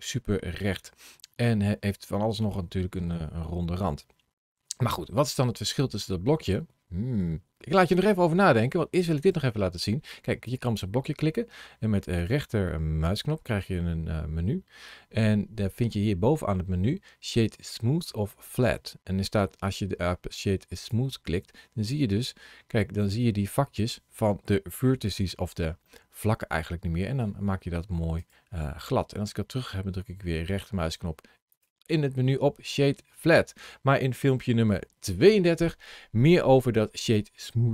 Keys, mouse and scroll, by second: 5.5 middle click, 9.0 right click, 10.3 click, 12.0 right click, 21.8 middle click, 23.3-23.9 scroll up 2, 24.9 shift+middle click, 25.7 middle click, 27.4-28.0 scroll down 1, 28.0 right click, 32.2 scroll down 1, 33.0 middle click.